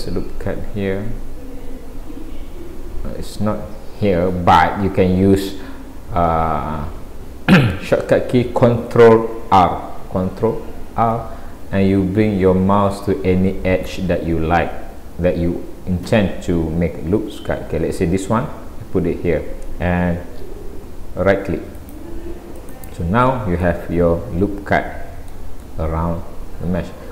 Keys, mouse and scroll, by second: 4.6 Escape, 10.9 ctrl+r, 23.7 middle click, 25.7 middle click.